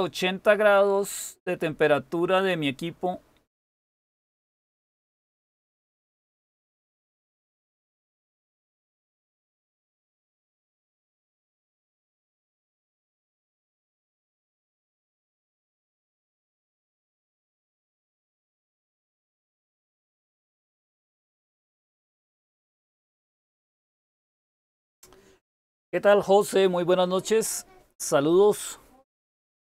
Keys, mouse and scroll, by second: 18.2 super+k.